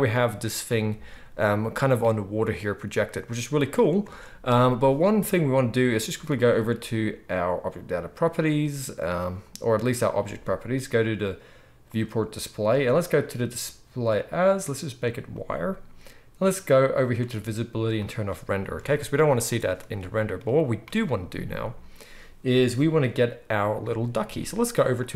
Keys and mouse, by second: 0.4-25.1 shift+right drag, 4.0 space, 6.3 click, 11.9-18.0 drag, 18.8 alt+a.